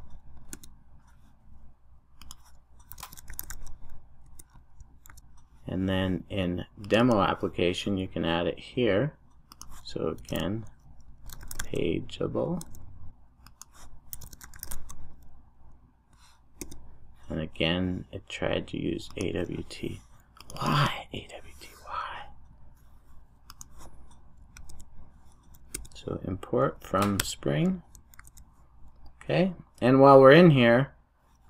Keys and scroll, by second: 0.5 Return, 5.1 super+s, 12.7 Return, 16.6 Return, 28.2 super+s.